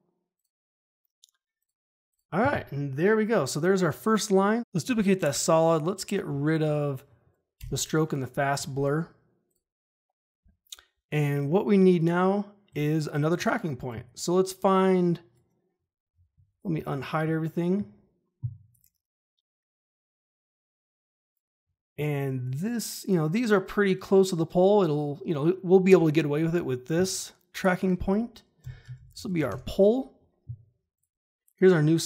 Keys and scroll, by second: 7.5 Delete, 16.6 ctrl+shift+h, 28.6 Return, 28.7-29.8 typing.